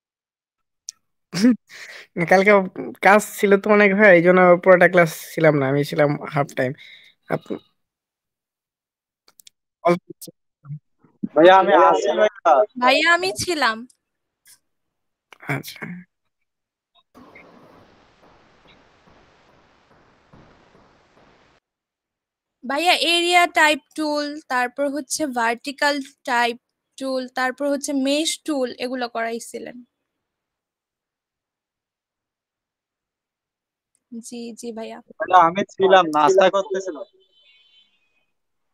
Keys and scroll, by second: 0.8 ctrl+space, 1.4 ctrl+space, 2.1 ctrl+space, 4.5 ctrl+space, 9.9 typing, 20.4 ctrl+space, 21.7 ctrl+space, 22.6 ctrl+space, 24.0 ctrl+alt+space.